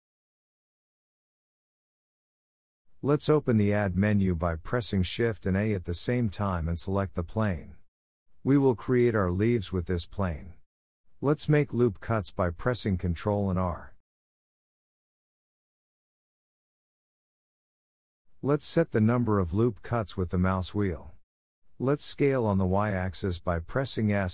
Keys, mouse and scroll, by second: 0.4-0.8 scroll down 3, 0.8-1.2 shift+middle drag, 1.2 shift+a, 3.7 scroll down 2, 3.9-4.7 shift+middle drag, 4.7 g, 6.4 o, 6.9 g, 8.1 shift+middle drag, 8.2-8.8 scroll up 6, 8.8 Tab, 9.4 shift+middle click, 9.6-10.9 scroll up 1, 10.9-13.1 scroll down 3, 13.7 2, 13.9 click, 14.3 g, 16.3 o, 16.9 g, 18.1 shift+middle click, 18.3-18.8 scroll up 2, 18.8-19.8 shift+middle drag, 19.8-20.5 scroll down 1, 20.5 ctrl+r, 24.2 KP_7.